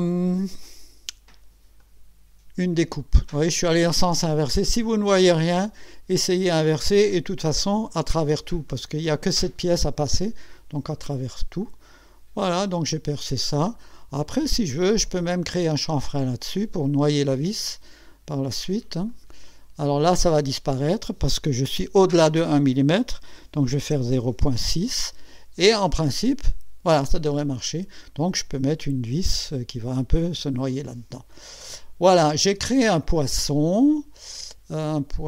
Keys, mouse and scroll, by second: 1.8 click, 4.9 click, 5.7 click, 7.1 click, 8.0 click, 8.7 click, 10.0-11.8 drag, 12.4 click, 13.9 scroll up 1, 15.9 click, 19.1 click, 23.6-24.9 typing, 26.2 click, 27.4 click, 30.6-31.3 drag, 31.6 click, 32.8 click, 33.8 click.